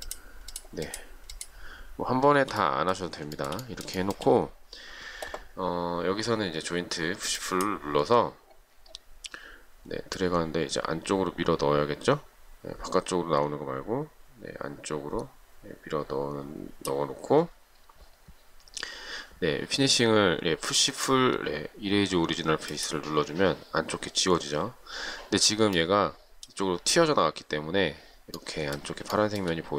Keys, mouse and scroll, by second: 0.3 shift+click, 0.7 shift+click, 0.9 shift+double click, 1.1 shift+click, 1.5 shift+click, 1.6 shift+double click, 3.6 shift+middle click, 4.2 shift+middle click, 29.4 shift+middle click.